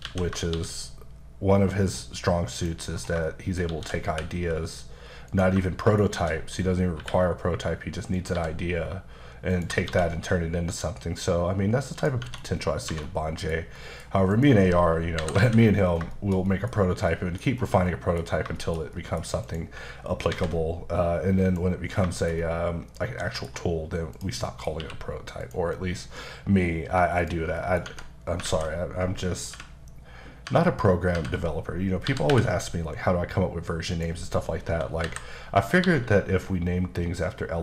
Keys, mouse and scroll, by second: 0.1 a, 0.5 shift+d, 2.5 click, 2.9 scroll down 3, 3.3 shift+middle click, 3.7-4.1 typing, 5.3 click, 5.7 shift+middle click, 6.1 shift+d, 8.1 click, 8.3 g, 9.5 click, 9.8 shift+d, 11.9 click, 12.2 Tab, 12.5-12.9 scroll down 2, 12.9 1, 13.0 middle click, 13.7 middle click, 14.3 click, 15.2 KP_5, 15.4 alt+a, 15.8 scroll down 2, 16.1 shift+middle click, 16.7-17.1 scroll up 2, 17.1 middle click, 17.5-17.9 scroll up 1, 17.9 middle click, 18.6 shift+middle click, 19.4 click, 20.3 alt+v, 21.4 click, 21.9 scroll, 21.9 scroll down 2, 22.1 shift+middle click, 24.1 click, 24.4 middle click, 24.8 q, 25.4 click, 26.0-27.2 scroll down 1, 27.2 click, 27.6 middle click, 27.8 Tab, 28.4 alt+a, 29.5-32.3 typing, 33.9 click, 34.6 KP_7, 35.8 g.